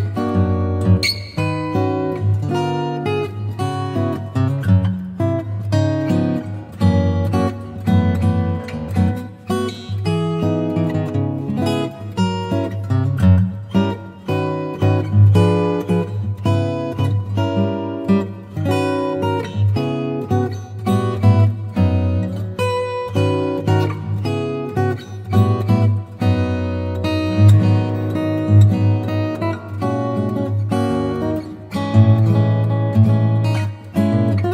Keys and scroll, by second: 0.2 space, 3.7-7.0 typing, 8.5 ], 11.3 [, 12.5 [, 13.6 z, 14.6 v, 14.9 m, 21.0 shift+super+n, 21.3 shift+super+Return, 21.8 alt+Delete, 22.1 alt+super+d, 22.2 super+v, 22.9 alt+super+v, 26.1 shift+super+e, 26.7 super+e, 29.0 shift+Up, 30.7 shift+Down.